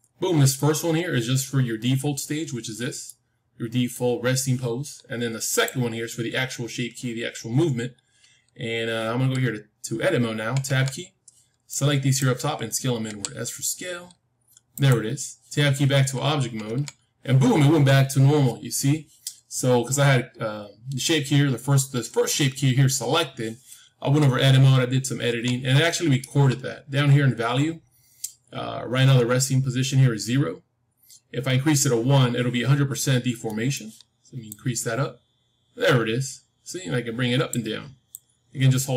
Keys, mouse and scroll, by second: 1.5-5.0 middle drag, 1.5-3.0 scroll up 1, 5.4-7.7 drag, 10.6 Tab, 11.6-13.6 drag, 13.0 s, 16.6 Tab, 24.1 Tab, 25.2 Tab, 26.8-28.5 scroll up 1, 28.5 scroll up 1, 33.4-35.4 middle drag, 34.4-37.4 drag, 38.0-38.9 drag.